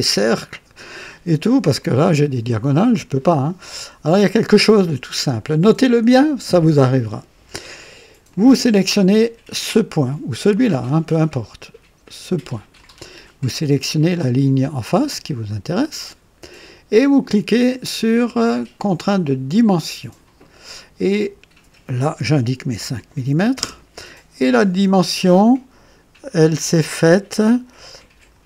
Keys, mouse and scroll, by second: 8.3 click, 12.5 click, 15.4 click, 19.6 click, 22.7 KP_5, 23.6 KP_Enter, 25.3-28.4 drag.